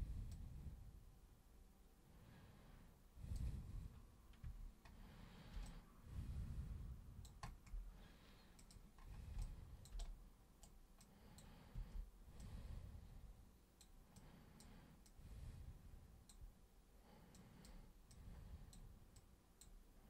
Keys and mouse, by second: 0.3-3.3 super+drag, 4.4 super+1, 5.6-7.2 alt+super+drag, 8.6 super+click, 9.4 alt+super+click, 10.0 super+right click, 11.0 super+click, 11.7 super+w, 12.4-13.8 super+drag, 14.1 super+click, 15.0-16.3 super+drag, 17.3 super+click, 18.1 super+click, 19.2 super+click.